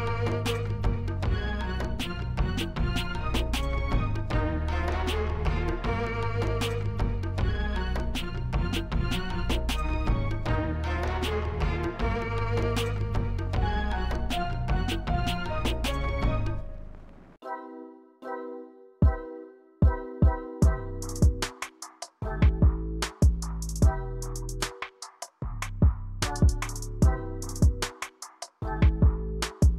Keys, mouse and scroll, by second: 0.7-2.9 scroll up 1, 2.9-3.2 scroll down 1, 3.2 middle click, 10.0 click, 10.9 click, 13.9 click, 15.5 click, 16.8 click, 19.2 click, 20.1 click, 20.7 click, 21.8 click.